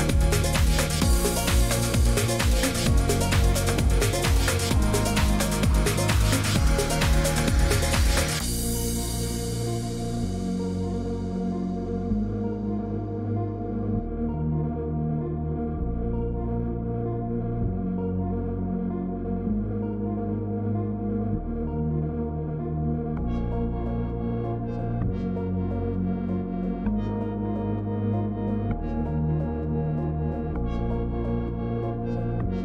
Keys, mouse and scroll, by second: 2.0 click, 3.3 click, 6.1 shift+click, 7.3 click, 9.1 click, 11.2 click, 13.0 click, 14.6 click, 17.7 click, 19.1 click, 20.9 click, 22.5 click, 23.1 click, 23.5 Escape.